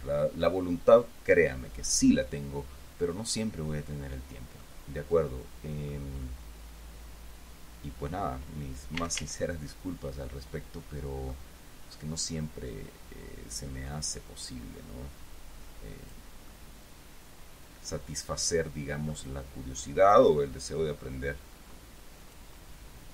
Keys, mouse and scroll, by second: 4.9-6.4 middle drag, 6.6-8.7 middle drag, 9.3 a, 10.4-11.8 middle drag, 13.0-16.6 drag, 16.8-19.6 middle drag, 20.4-22.9 drag.